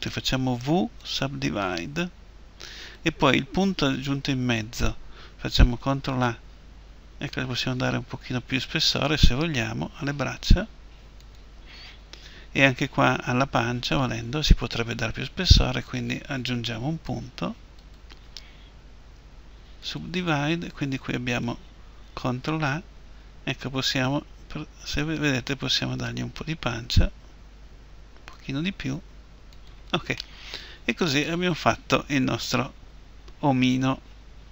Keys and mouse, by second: 0.0 w, 5.7 ctrl+a, 11.1-14.5 drag, 15.6-19.7 right drag, 18.8 w, 21.0-25.2 right drag, 22.0 ctrl+a, 29.4-31.4 drag, 31.4 middle click.